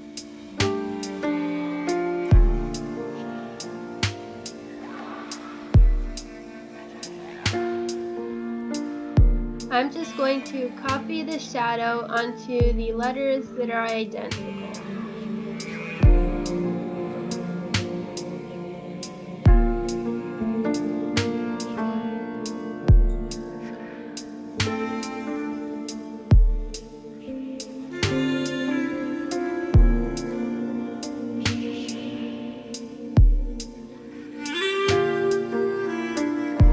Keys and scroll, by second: 1.4 Delete, 2.3 Delete, 3.9 ctrl+c, 4.2 ctrl+z, 6.7 ctrl+f, 7.8 space, 8.6 ctrl+s, 9.6 space, 11.8 ctrl+z, 13.4 space, 14.9 space, 17.5 Right, 17.7 Left, 18.2 Down, 18.3 Up, 20.3 space, 20.5 space, 20.8 space, 21.1 Left, 22.6 ctrl+z, 23.5 space, 23.7 space, 24.8 space, 25.1 space, 25.9 Delete, 26.4 space, 26.8 space, 27.3 space, 28.3 space, 28.7 space, 29.0 space, 30.6 space, 31.2 space, 32.1 space.